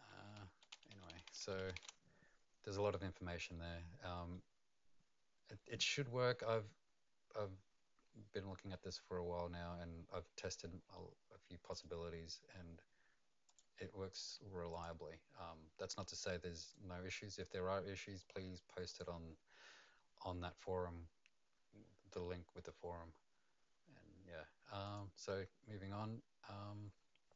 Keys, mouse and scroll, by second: 0.4 ctrl+z, 0.7 ctrl+z, 1.1 ctrl+z, 1.2 ctrl+z, 1.6 ctrl+z, 1.7 ctrl+z, 4.1 middle click, 8.5-11.3 scroll down 2, 11.7 click, 13.4 click, 16.6 right click, 18.8 click, 25.1 click.